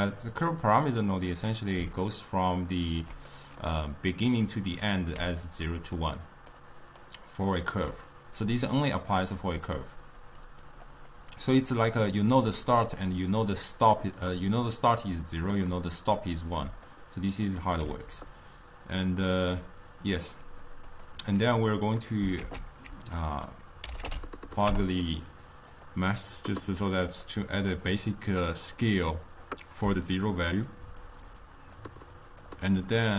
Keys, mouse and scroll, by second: 0.3-1.6 drag, 1.6-5.3 middle drag, 5.3-7.8 typing, 5.5 click, 6.3 click, 6.7 click, 7.3 click, 9.7 d, 10.5-11.6 drag, 16.7 d, 17.0 right click, 17.8 d, 20.5 click, 21.0 click, 21.3-22.5 drag, 22.5 ctrl+a, 27.3-29.9 middle drag, 29.9-32.8 typing, 30.2-30.7 drag, 31.1 click, 31.5 click, 32.3 click.